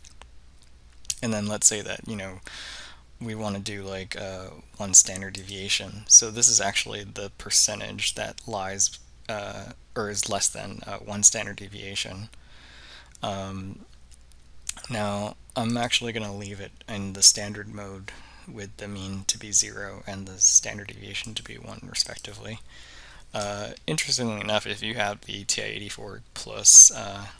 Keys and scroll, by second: 5.5 1, 15.8 Down, 21.3 Return, 22.2 Return.